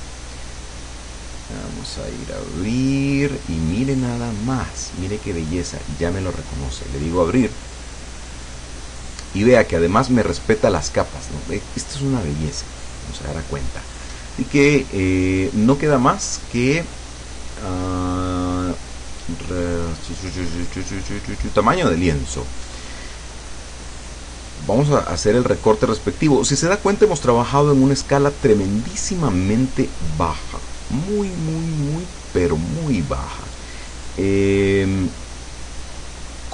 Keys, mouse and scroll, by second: 1.4 click, 4.4 click, 6.7 click, 10.2-10.8 scroll up 1, 10.8-11.2 scroll down 1, 11.6-11.9 scroll down 1, 15.9 click, 21.7 click, 25.6-27.3 drag, 28.8-31.4 drag, 33.2 click, 34.9 click, 36.2 click.